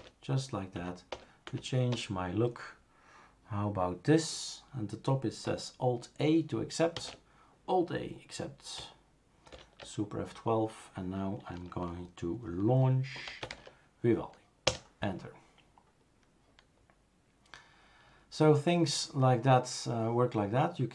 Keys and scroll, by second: 0.0 Return, 0.8 Down, 1.1 Return, 1.5 Down, 1.9 Return, 7.0 alt+a, 9.5 super+F12, 13.0-14.0 typing, 14.7 Return.